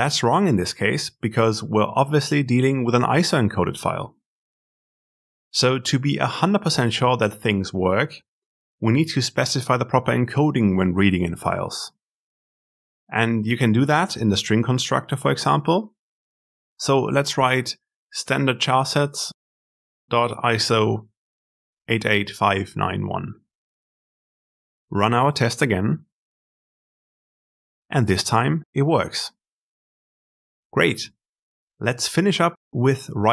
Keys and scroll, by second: 22.6 ctrl+alt+F10.